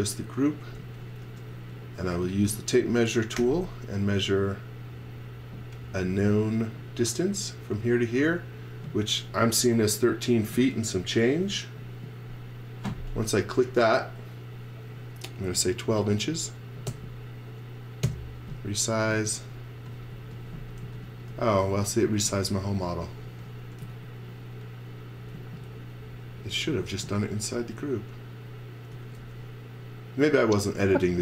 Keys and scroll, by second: 0.2-3.4 typing, 15.7-16.5 typing, 16.9 Return, 18.0 Return, 19.1-22.1 typing, 23.3 x, 23.8 z, 25.3 z, 26.9 space, 28.9 x, 29.2 v.